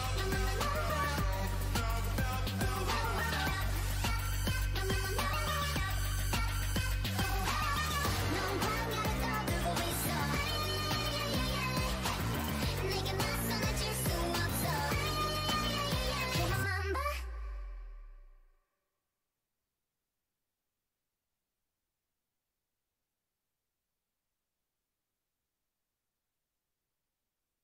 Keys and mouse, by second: 4.1 ctrl+r, 9.0-11.7 right drag, 9.6-12.2 typing, 13.8-15.4 right drag, 16.0 f, 16.8 f, 17.0 f, 17.2 f, 18.6 ctrl+z, 18.7 ctrl+z, 18.9 ctrl+z, 21.7 ctrl+r, 22.5-24.8 drag, 23.3 f, 23.7 f, 24.8 ctrl+r, 26.0-27.6 drag, 26.4 f, 26.9 f.